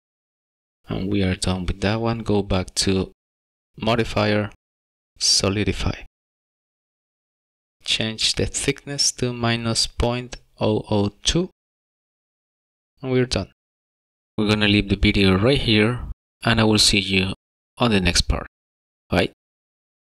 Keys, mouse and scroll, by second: 2.2 click, 3.5 click, 9.2 click, 11.7 KP_0, 13.5 KP_Enter, 15.2-15.7 scroll up 3, 16.0 middle click.